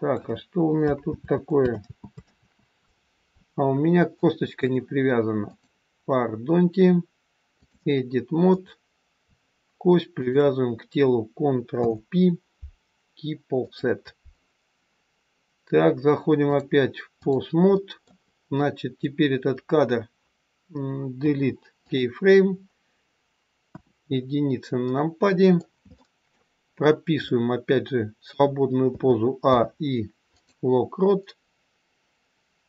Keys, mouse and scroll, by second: 1.1 ctrl+z, 1.7 ctrl+z, 2.3 ctrl+z, 3.7 scroll up 4, 4.2 shift+middle click, 5.4 click, 10.2 shift+click, 11.6 ctrl+p, 16.4 click, 17.7 middle click, 18.6 click, 21.1 Delete, 22.6 scroll down 4, 23.7 KP_1, 24.9 middle click, 25.9 shift+middle click, 27.2 scroll up 1, 27.3 middle click, 28.8 a, 29.4 i.